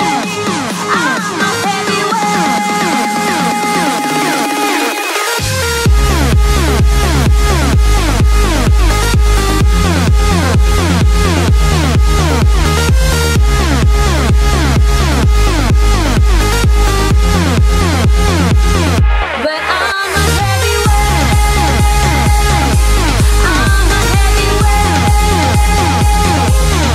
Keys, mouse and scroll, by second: 8.5 Tab, 12.9 click, 15.1-18.7 drag, 20.8-21.7 scroll up 4, 21.7-25.0 middle drag, 25.0 click, 26.1 click, 26.7 click.